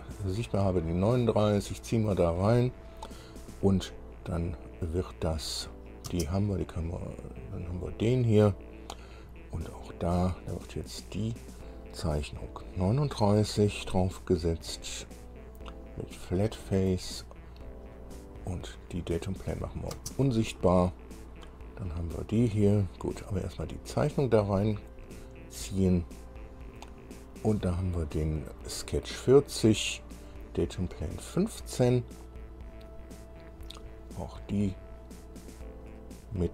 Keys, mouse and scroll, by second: 1.1-2.6 drag, 5.5 click, 6.3 space, 7.8 click, 10.3 click, 11.6 click, 13.4 click, 14.9 click, 17.1 click, 19.7 click, 20.2 space, 21.7 click, 23.3 scroll down 1, 24.3 click, 25.0-26.8 drag, 30.5 click, 34.8 click, 36.1 click.